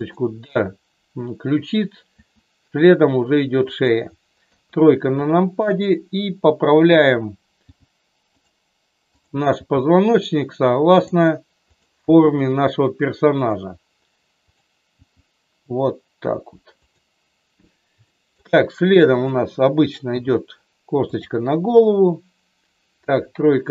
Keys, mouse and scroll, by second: 0.0 click, 2.2 e, 3.7 click, 4.5 KP_3, 7.6 g, 8.3 click, 9.6 g, 12.0 g, 14.4 click, 15.0 g, 18.0 shift+middle click, 19.1 click, 20.1 e, 21.1 click, 23.0 KP_3.